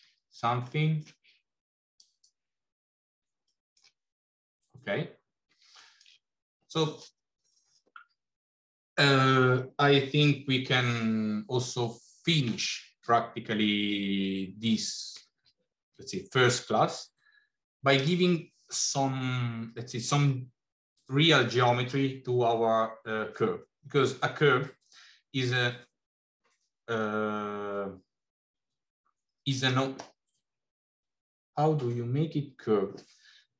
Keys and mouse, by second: 0.6 middle click, 3.3 middle click, 5.8 shift+middle click, 17.8 click.